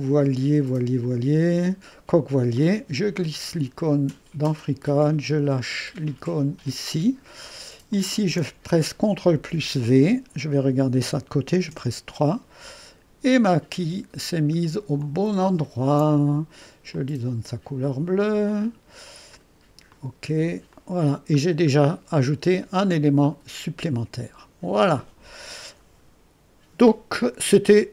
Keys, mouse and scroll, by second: 2.6-9.3 drag, 9.3 ctrl+v, 11.7 ctrl+v, 13.0-17.6 drag, 15.9 ctrl+d, 18.5 click, 19.9 click, 20.8 click, 21.4-22.8 middle drag, 22.8-27.9 drag.